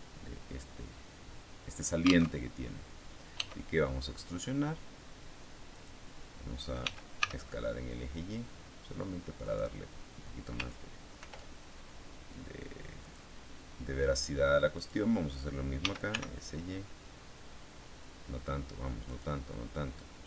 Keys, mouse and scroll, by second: 2.3 alt+Tab, 3.3 e, 5.7 click, 6.7 s, 7.1 y, 9.3 click, 11.1 ctrl+r, 12.9 click, 14.7 click, 15.7 s, 16.0 y, 19.0 click, 20.1 s.